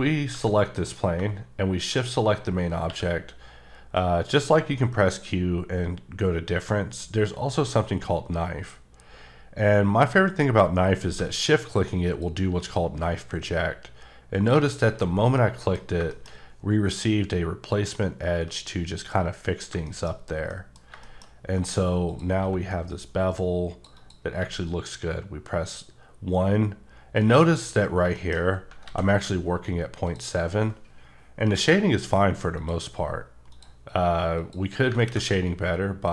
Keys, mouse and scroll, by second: 0.3 g, 0.8 right click, 1.8 shift+click, 2.8 q, 11.2 q, 12.1 click, 14.9 h, 15.4 middle click, 16.1 double middle click, 16.3-17.2 scroll up 3, 19.5-19.9 scroll down 2, 19.7 shift+Num_Lock, 19.9 shift+middle click, 21.3-21.7 scroll up 4, 22.1 click, 22.4 q, 22.9 click, 23.9 double click, 24.4 1, 27.2 right click, 27.8 scroll down 1, 27.9 scroll, 28.1 shift+middle click, 28.8 a, 30.1 click, 32.0-32.6 scroll down 1, 32.6 click, 33.5 click, 34.4 click.